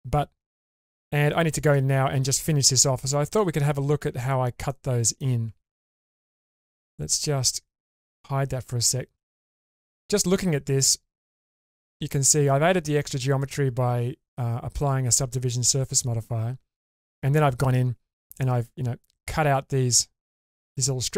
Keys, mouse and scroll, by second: 2.7-3.2 middle drag, 3.7 shift+space, 4.3-4.7 scroll down 2, 4.7-5.3 middle drag, 5.5 Tab, 7.9 click, 8.9-9.2 scroll up 2, 9.3 shift+middle click, 10.0 scroll up 1, 10.9 scroll down 2, 11.4 shift+middle click.